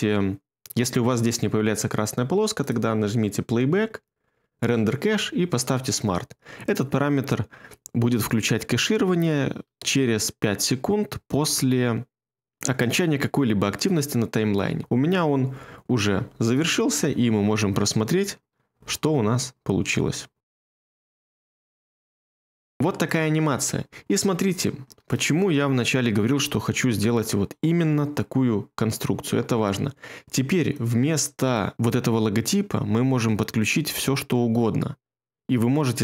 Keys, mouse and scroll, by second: 18.7 space.